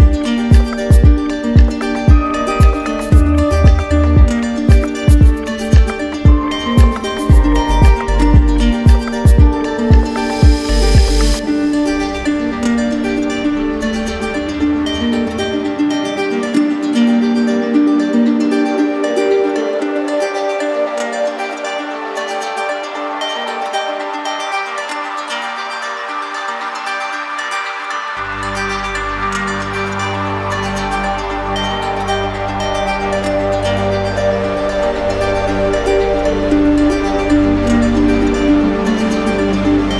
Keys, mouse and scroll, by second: 0.7 right click, 3.7 alt+click, 5.9 alt+click, 5.9 ctrl+z, 8.7 alt+click, 11.5 alt+click, 12.9 alt+click, 13.4 alt+right click, 17.7 ctrl+z, 18.3 ctrl+z, 20.3 click, 20.5 click, 21.7 click, 23.2 click, 29.2 click, 30.1 shift+click, 31.4 click, 32.9 click, 33.9 click, 35.5-36.6 drag, 37.1-38.0 typing, 38.6 Return, 39.6 typing.